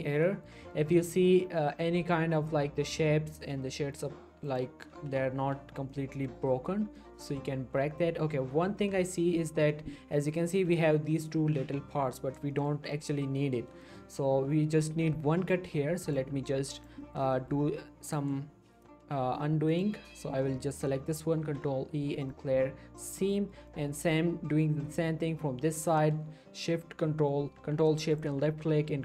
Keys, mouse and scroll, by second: 0.0 scroll down 1, 0.2 middle click, 0.4-0.7 scroll up 1, 0.7 middle click, 0.9-1.8 scroll up 1, 1.8 middle click, 2.7-3.2 scroll up 1, 3.2 scroll down 1, 3.5 middle click, 3.7-4.5 scroll up 1, 4.5 click, 4.9 l, 5.4 l, 5.8 scroll down 1, 5.9-6.8 middle drag, 7.6-8.1 scroll up 1, 10.4 middle click, 10.6 g, 11.1 right click, 11.4 scroll down 1, 11.6-12.4 middle click, 12.5 shift+middle click, 12.9-13.3 scroll up 1, 13.3 middle click, 13.5 scroll up 1, 13.8 shift+middle click, 16.0 click, 17.0 middle click, 17.3-17.7 shift+scroll up 2, 17.5 shift+middle click, 18.1 click, 19.7 ctrl+shift+click, 21.4 ctrl+e, 22.2 click, 22.5 scroll down 1, 22.6-23.3 middle click, 23.7 shift+middle click, 23.9 scroll up 1, 24.8 click, 25.7 click, 28.3 ctrl+shift+click.